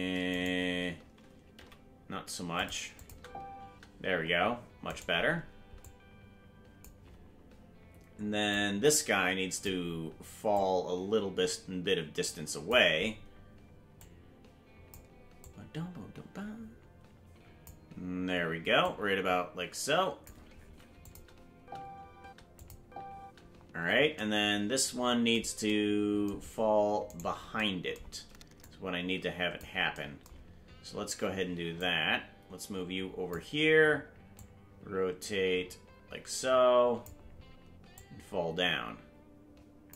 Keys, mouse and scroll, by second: 0.3-1.5 right drag, 0.3 space, 1.5 g, 2.9-4.1 drag, 3.1 space, 4.9 right click, 5.8-6.8 drag, 8.5-9.6 drag, 10.5-12.7 drag, 13.9 click, 15.4-17.7 drag, 18.8-20.2 drag, 21.0 click, 21.5 space, 22.5 click, 22.8 space, 24.1 space, 27.1 right click, 28.6-29.6 drag, 31.7-33.3 drag, 34.3-37.1 drag, 37.9-39.9 drag.